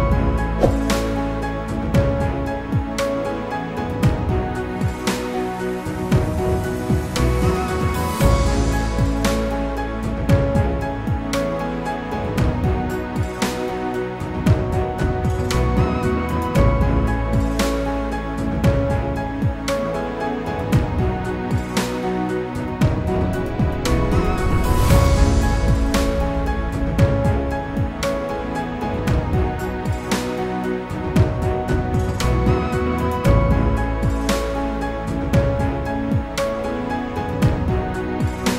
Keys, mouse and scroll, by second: 1.0 click, 1.2 double click, 2.5 click, 6.8 click, 8.5 click, 8.8 double click, 10.6 ctrl+r, 11.3 click, 12.0 ctrl+click, 13.9 click, 14.7-15.2 scroll up 1, 16.3 ctrl+click, 18.4-19.2 scroll down 1, 19.2 click, 21.4 F4, 22.8 F9, 27.9 click, 31.9 click, 33.2 ctrl+o, 34.5 click, 36.2 click.